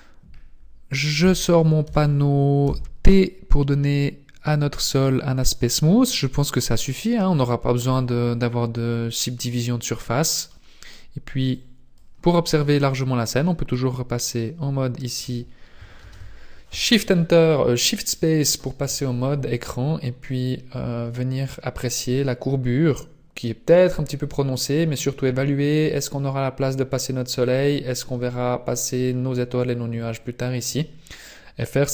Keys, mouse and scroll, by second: 1.2 n, 1.8 n, 2.6 t, 4.9 click, 5.7 scroll up 1, 5.9 scroll down 1, 7.1-8.1 scroll down 2, 11.5 click, 13.4-13.9 scroll down 1, 16.0 shift+space, 19.3 scroll up 1, 29.8 scroll down 1.